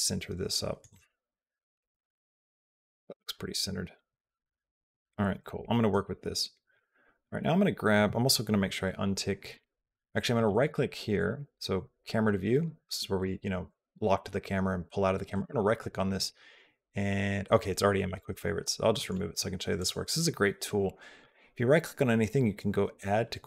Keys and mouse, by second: 1.1 t.